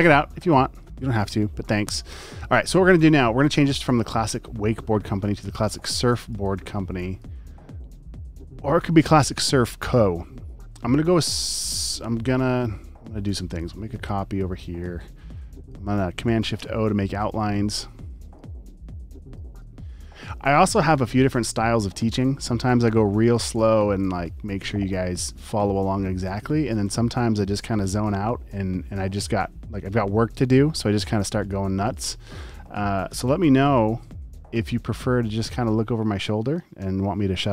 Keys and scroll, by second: 6.0 v, 6.9 space, 13.5 v, 15.2 space, 15.7 super+space, 16.6 shift+super+o, 17.1 space, 17.6 super+space, 17.9 v, 18.4 v, 21.0 e, 23.0 v, 23.1 space, 23.6 v, 26.3 space, 26.8 v, 27.4 space, 31.9-34.1 typing, 32.4 super+space, 33.1 shift+super+}, 34.0 super+space, 36.9 e.